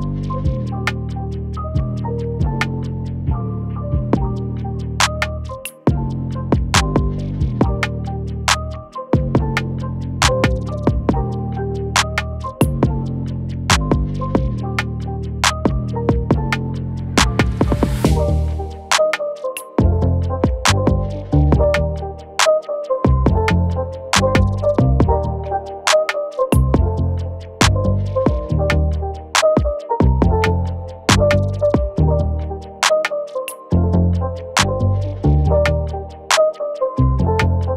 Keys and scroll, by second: 0.0 ctrl+-, 0.7 ctrl+-, 16.9-17.6 space, 18.4 Delete, 22.6 ctrl++, 22.9 ctrl++, 22.9-27.6 typing, 24.2 ctrl+-, 24.4 ctrl+-, 37.7 ctrl+-.